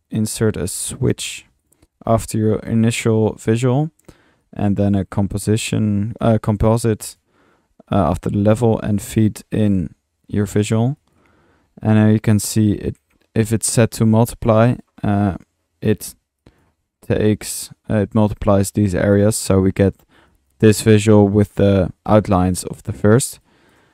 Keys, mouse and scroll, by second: 0.3 Tab, 0.4-1.1 typing, 1.6-2.0 drag, 2.2 click, 3.4 click, 4.4-5.3 drag, 4.9-6.1 typing, 5.6 drag, 6.1 click, 7.1 drag, 8.5-9.3 drag, 9.7-10.9 drag, 11.0-11.3 drag, 11.7-12.7 middle drag, 14.0 drag, 14.7 click, 15.9-16.4 middle drag, 16.4-16.8 drag, 19.1 middle click, 20.3 click, 21.4 middle click, 22.5 middle click, 23.4-23.9 drag.